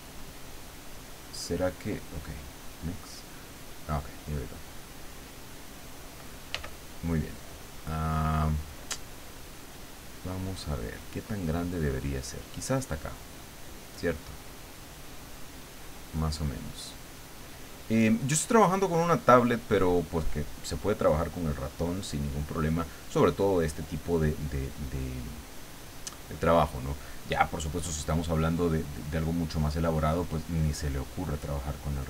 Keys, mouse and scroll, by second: 3.2 click, 4.6 click, 6.5 f, 7.4 click, 9.0 click, 10.1 click, 10.7 click, 12.2-21.4 drag, 30.4-32.0 drag.